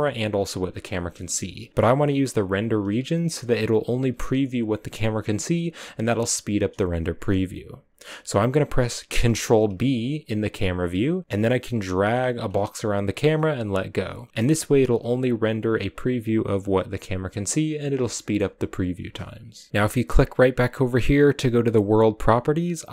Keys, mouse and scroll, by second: 14.3-14.8 scroll up 3, 14.8-18.1 scroll up 1, 18.1-22.9 shift+middle drag.